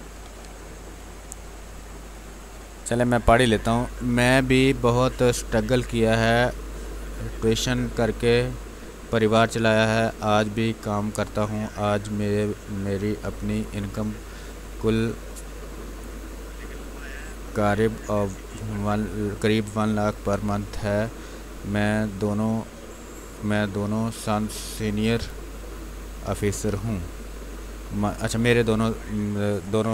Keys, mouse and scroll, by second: 0.0 ctrl+d, 1.1 click, 2.4 b.